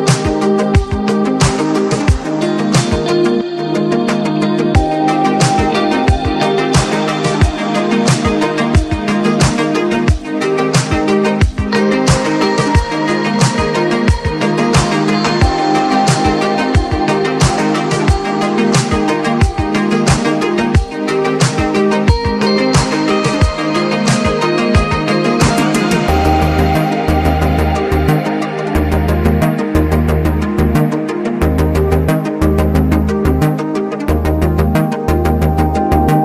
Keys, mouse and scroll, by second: 1.1-3.8 drag, 3.9-5.8 drag, 6.3-7.8 drag, 7.8 click, 9.3 typing, 9.3-12.3 drag, 13.1 alt+scroll up 1, 13.6 alt+scroll down 1, 14.6 click, 14.6-15.3 typing, 15.1 ctrl+scroll up 1, 15.8 click, 16.2 right click, 16.8 click, 17.6 ctrl+g, 17.9-28.0 drag, 30.2 click, 31.0 alt+scroll down 1, 32.6 click, 33.6 alt+scroll up 1, 34.2-35.4 alt+drag, 35.4 ctrl+z, 35.5 typing, 36.1 click.